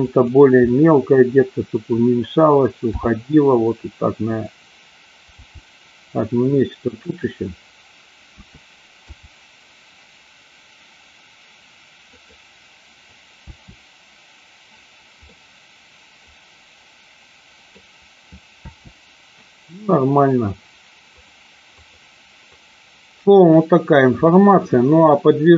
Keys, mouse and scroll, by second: 0.2-0.6 drag, 0.9-2.1 middle drag, 3.0 g, 4.3 click, 5.3 g, 7.1 click, 8.4 a, 9.1 i, 13.4 space, 15.4-17.8 middle drag, 18.8 space, 21.1 click, 21.7-22.1 drag, 22.6-23.7 drag, 24.3-25.5 middle drag.